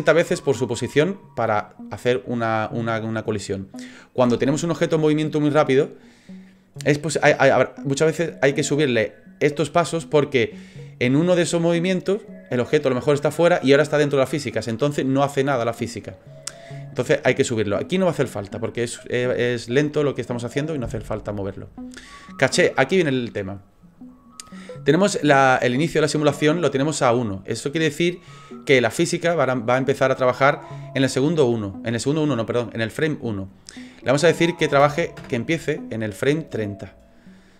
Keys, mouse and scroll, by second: 22.2 click, 33.5 click, 37.0 click.